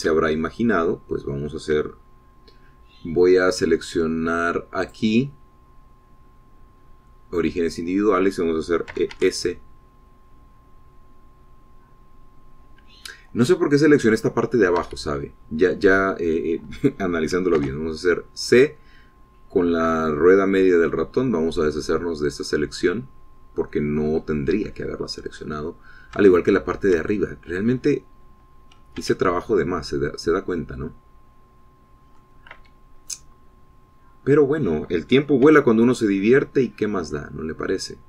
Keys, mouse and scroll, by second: 1.2 scroll up 2, 1.9-3.1 shift+drag, 6.3 click, 9.2 click, 10.4 e, 10.6 s, 16.3 Escape, 19.0 c, 19.5-20.0 scroll down 1, 21.9-25.7 drag, 25.7 middle click, 26.0 Escape, 26.4-26.7 scroll down 1, 26.7 middle click, 26.9-28.5 drag, 28.8 shift+scroll up 1, 30.5 c, 31.3-33.9 drag, 34.1 Escape, 34.6-36.4 drag, 36.4-37.7 middle drag, 37.0 c, 37.7-38.0 drag.